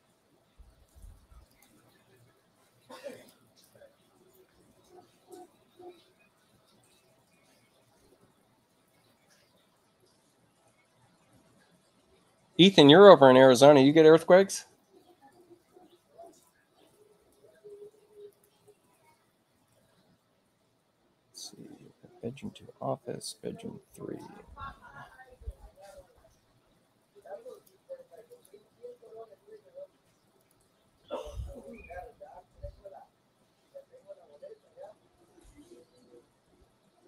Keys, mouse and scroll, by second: 1.4 click, 3.0 click, 18.2 click, 27.4 click, 28.2 click, 30.3 click.